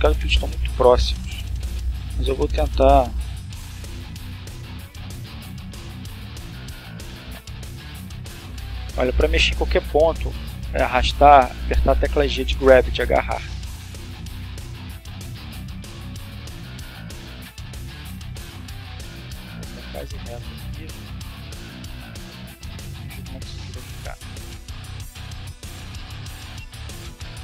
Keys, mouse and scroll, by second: 1.0 click, 1.9 g, 3.7 Escape, 4.1 middle click, 4.9 g, 8.2 click, 9.9-12.4 drag, 12.7 right click, 13.3 right click, 13.8 g, 16.1 click, 16.8-17.8 shift+middle drag, 18.3-18.9 shift+scroll down 4, 19.2 shift+middle click, 20.1-20.7 shift+scroll down 4, 21.0-21.7 drag, 22.7 click, 23.7 click, 24.7-25.5 drag, 26.5 click, 27.2 click.